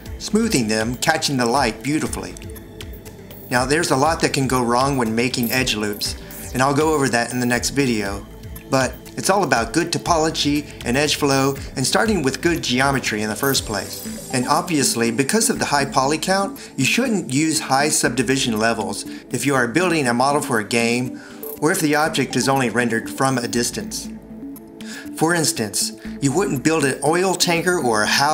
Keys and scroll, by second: 25.1 1.